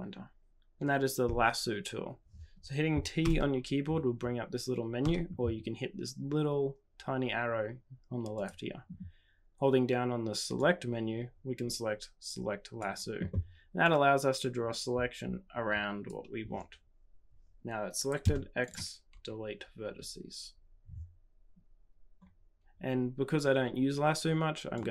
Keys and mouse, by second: 3.2 t, 4.9 t, 8.3 click, 10.6-12.8 drag, 13.8-17.1 drag, 18.2 x, 23.5 typing, 24.7-24.9 drag.